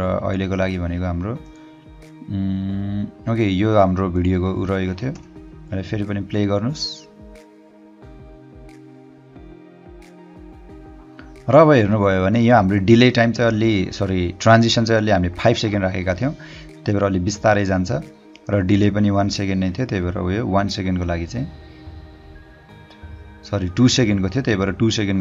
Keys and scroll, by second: 5.3 Return.